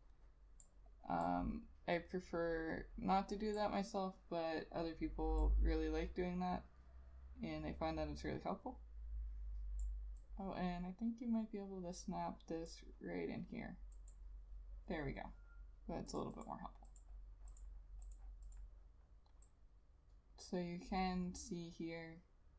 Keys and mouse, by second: 16.5 double click.